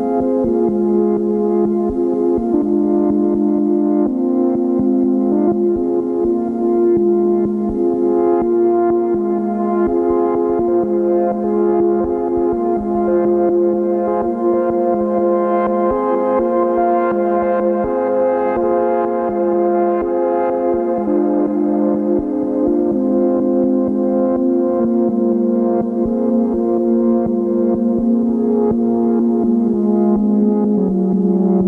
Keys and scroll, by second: 5.4 ctrl+k, 29.6 ctrl+z.